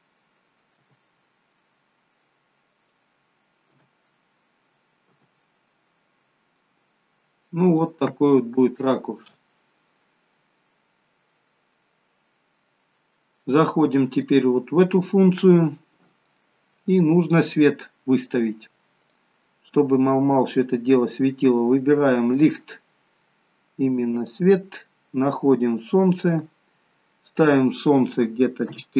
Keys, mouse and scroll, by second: 3.6 g, 3.6 KP_0, 5.1 g, 15.7 click, 18.9 click, 22.3 click, 23.0-23.7 scroll down 2, 24.1 click.